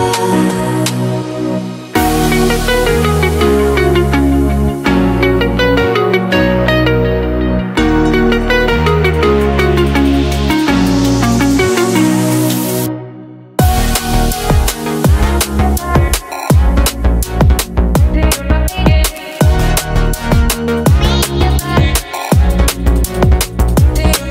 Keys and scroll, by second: 7.1 5, 20.0 3.